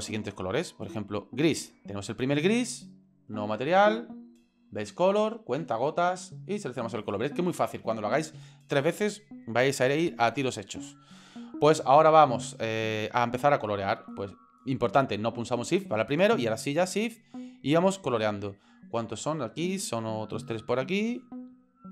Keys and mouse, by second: 0.8 right click, 3.4 click, 14.0 right click, 16.9 shift+right click, 17.4 shift+right click, 19.4 shift+right click, 20.0 shift+right click, 20.4 shift+right click, 20.9 shift+right click.